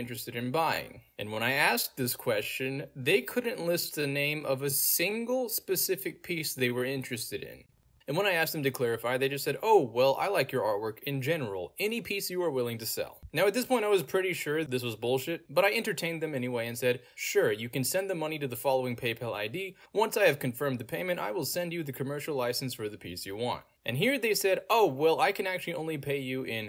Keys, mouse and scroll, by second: 0.7 click, 4.8 click, 5.8-6.9 scroll down 2, 6.0 middle click, 8.1 click, 12.6 click, 15.5-16.7 scroll down 2, 16.7-17.2 scroll down 1, 18.4 click, 26.0 y, 26.0 Return.